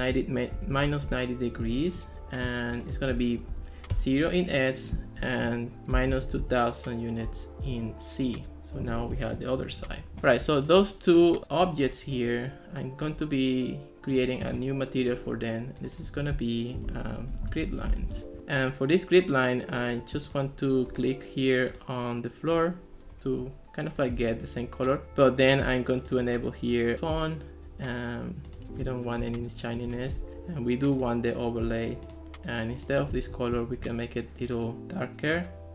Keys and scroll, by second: 0.4-1.3 typing, 3.6 0, 4.0 Return, 5.7-6.8 typing, 7.8 Return, 16.7-18.6 typing, 29.2 0, 29.5 Return.